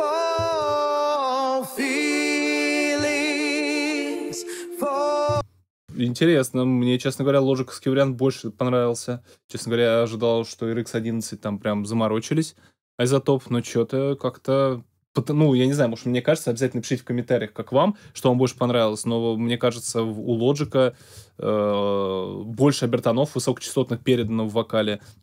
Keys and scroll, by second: 5.2 alt+space.